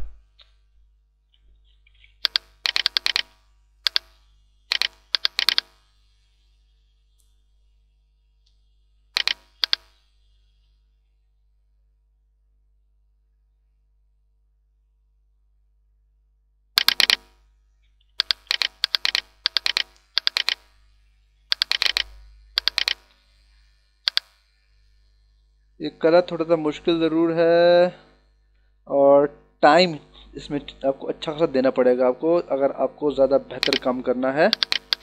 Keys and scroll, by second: 1.1 ctrl+=, 2.3 h, 3.8 e, 17.9 [, 22.8 space, 34.4 h.